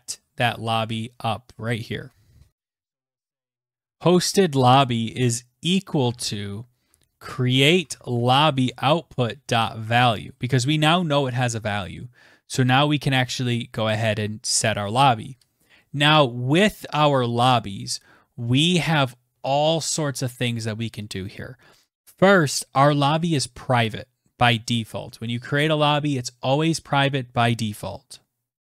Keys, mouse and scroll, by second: 0.0-1.2 scroll, 1.2-1.9 scroll down 15, 2.2-8.6 typing, 2.5 click, 3.4 Tab, 13.9 Return, 14.5 Return.